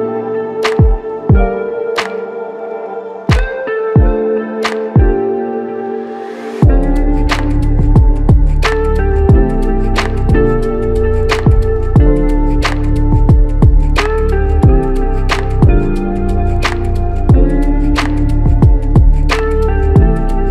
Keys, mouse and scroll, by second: 0.0 alt+click, 14.3 ctrl+z, 14.6-17.6 ctrl+z.